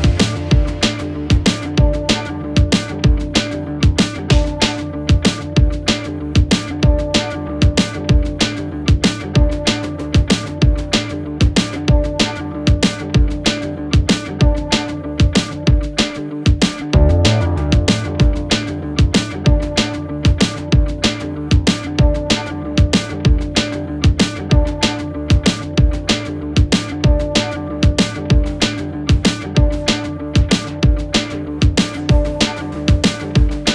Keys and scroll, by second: 3.7 ctrl+z, 5.2 ctrl+z, 5.7 4, 6.5 2, 6.9 3, 9.5 4, 16.1 3, 19.3 shift+f, 28.5 ], 28.8 ].